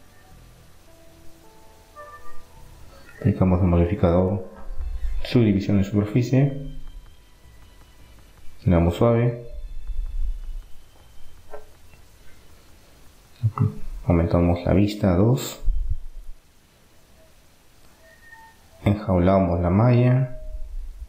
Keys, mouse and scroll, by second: 1.6 Tab, 2.1-3.1 middle drag, 3.1-5.4 drag, 6.1-7.4 middle drag, 7.9 middle click, 8.9 click, 9.4 middle click, 10.4 middle click, 12.8 click, 13.4 middle click, 14.2 Tab, 16.3 middle click, 17.1-18.1 drag, 18.1-21.0 middle drag.